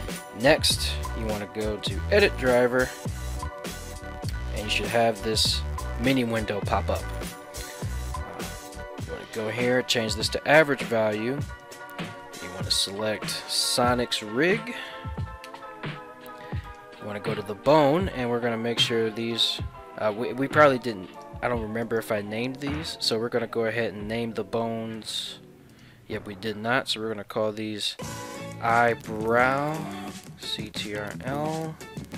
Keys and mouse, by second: 0.5-21.4 right drag, 14.6 Down, 21.9 right click, 22.4 ctrl+Tab, 25.0 click, 25.7-32.1 drag.